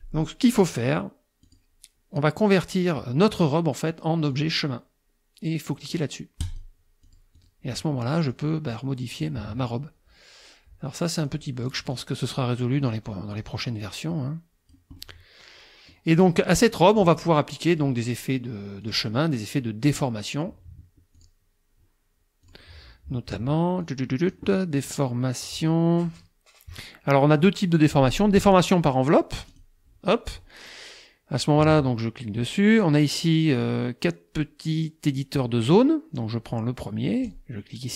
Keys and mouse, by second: 1.5 click, 2.6 click, 4.3 click, 6.5 click, 7.1 click, 7.5 click, 8.3-9.4 drag, 9.5 ctrl+z, 11.2 click, 11.7 click, 12.3 middle click, 13.3 click, 13.8-14.9 drag, 15.3 click, 16.2 click, 17.7 click, 18.8 click, 19.6 click, 21.2 click, 22.5 click, 23.8 click, 28.4 click, 29.5 click, 37.3 click.